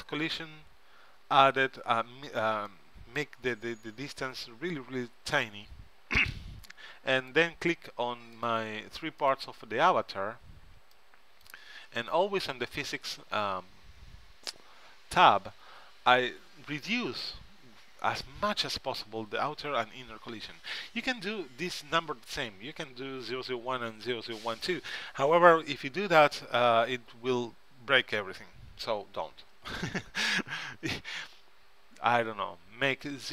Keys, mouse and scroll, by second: 2.8-4.5 drag, 7.3-10.9 drag, 11.1-12.7 drag.